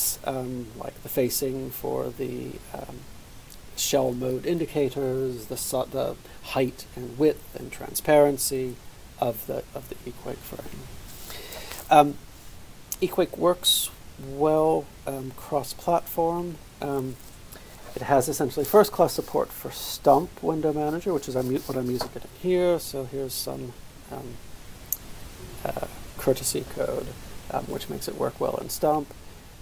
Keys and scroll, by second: 9.0 ctrl+v.